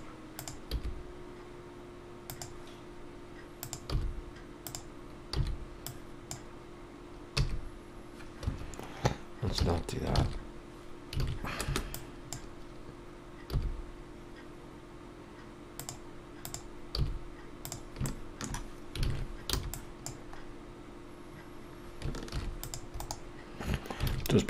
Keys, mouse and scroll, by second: 2.2 g, 4.7 g, 8.5 e, 15.7 g, 17.6 g, 18.0 shift+middle click, 19.0 click, 19.5 g, 23.0 ctrl+r, 23.0 scroll down 1.